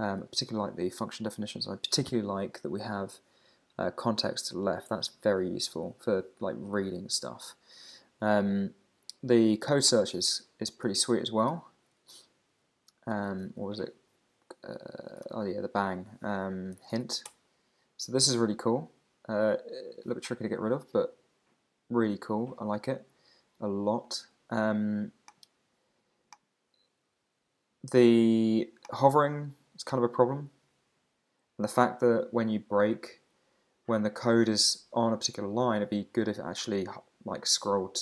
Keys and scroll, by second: 1.6 Down, 11.5 super+o, 15.3 shift+1, 17.3 Return.